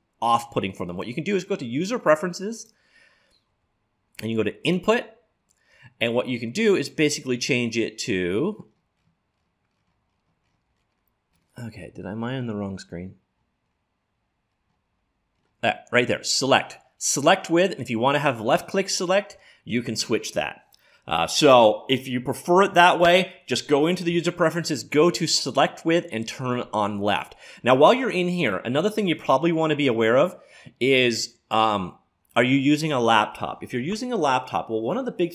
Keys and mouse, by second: 1.0-2.5 drag, 2.6 click.